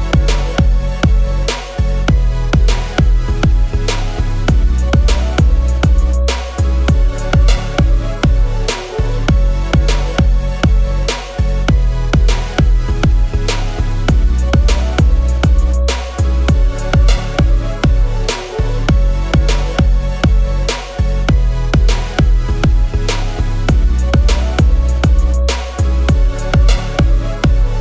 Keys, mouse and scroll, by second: 7.6 shift+click, 8.6 ctrl+g, 9.1 ctrl+-, 10.1 scroll down 1, 13.4 alt+click, 14.6 double click, 15.0 typing, 17.0 double click, 18.1 double click, 19.4 ctrl+shift+g, 22.1 typing.